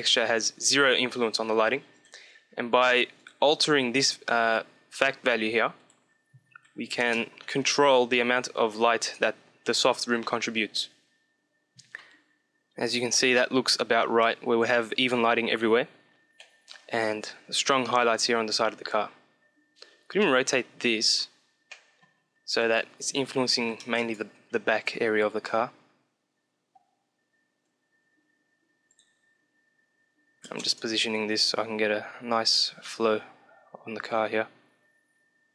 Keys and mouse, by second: 1.9-3.4 drag, 3.4-5.0 middle drag, 5.0-7.3 drag, 15.7-17.7 middle drag, 20.0-22.4 middle drag, 22.4-24.2 drag, 28.9-30.7 drag.